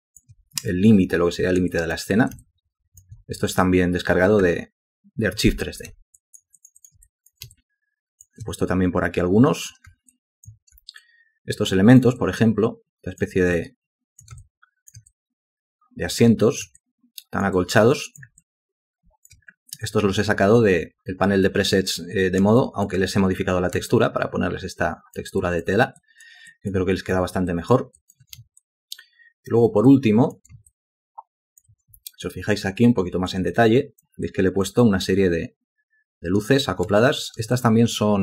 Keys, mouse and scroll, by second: 1.7 alt+click, 2.4 alt+shift+click, 6.2 ctrl+alt+click, 6.6 ctrl+alt+click, 6.9 ctrl+alt+double click, 7.5 alt+shift+click, 10.1 alt+click, 11.0 ctrl+alt+click, 12.2 alt+click, 13.6 ctrl+alt+click, 14.4 alt+shift+click, 15.1 alt+click, 16.8 alt+click, 17.6 alt+click, 18.4 alt+click, 22.6 alt+click, 23.9 alt+click, 25.4 alt+click, 26.0 alt+click, 26.5 alt+click, 27.5 ctrl+alt+click, 28.0 ctrl+alt+click, 28.6 alt+shift+click, 29.9 alt+click, 30.7 alt+shift+click, 32.2 ctrl+alt+click, 33.5 alt+click, 34.3 alt+click, 34.8 alt+click, 37.0 alt+click, 37.5 ctrl+alt+click.